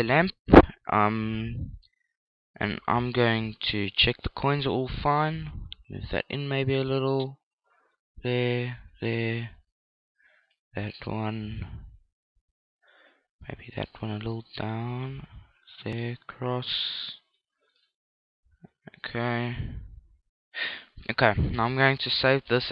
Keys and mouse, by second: 2.0-3.6 middle drag, 3.2 KP_0, 4.6 right click, 5.3-11.3 drag, 9.9 right click, 11.5 click, 14.3 click, 18.7 click, 18.7 right click.